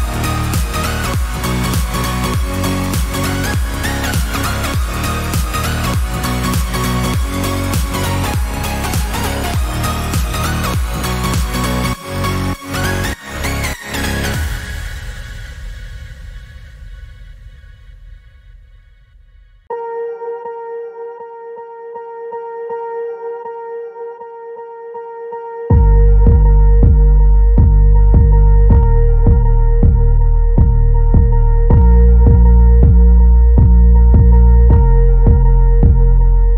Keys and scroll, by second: 9.1-9.7 typing, 31.1 ctrl+shift+a.